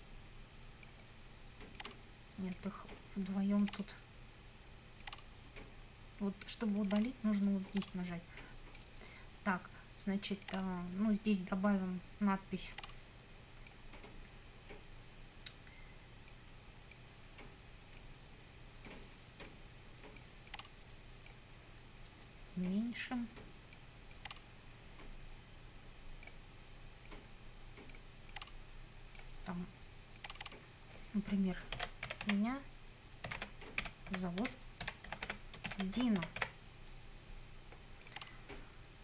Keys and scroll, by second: 31.5-36.9 typing.